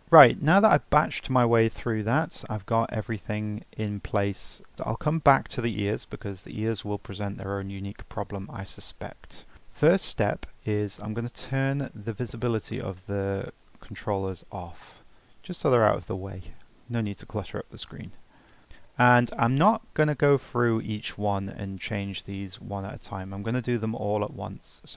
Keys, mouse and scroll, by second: 0.0-0.8 drag, 0.8-1.2 scroll up 1, 1.2-7.5 shift+middle drag, 7.9-8.3 scroll up 1, 8.3-9.3 middle drag, 9.3 scroll up 1, 9.5-11.2 middle drag, 11.2 click, 14.8 click, 15.8-17.6 middle drag, 17.6 scroll up 1, 17.9 shift+middle drag, 18.2-19.9 scroll up 4, 18.5 middle click, 20.7 click.